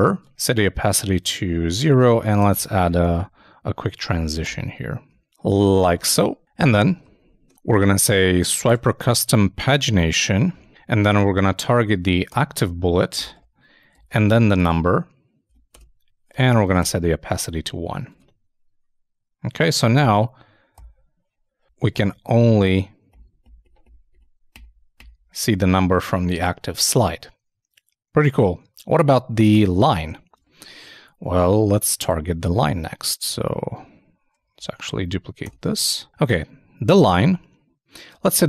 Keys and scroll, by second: 14.9 shift+space, 15.5 shift+[, 15.7 shift+Return, 17.8 super+Right, 17.9 super+s, 18.1 super+Tab, 30.3 super+Tab, 33.4 shift+Up, 34.4 alt+shift+Up, 38.2 alt+Right.